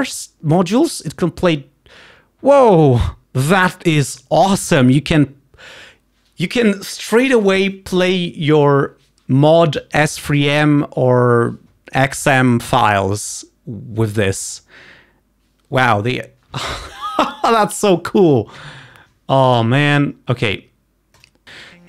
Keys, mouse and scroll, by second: 21.3 click.